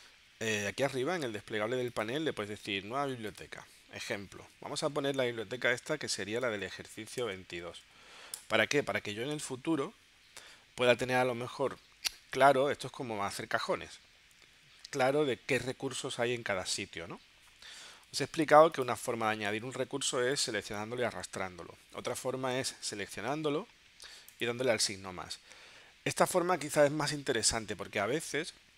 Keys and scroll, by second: 4.7-7.6 typing, 8.4 Return.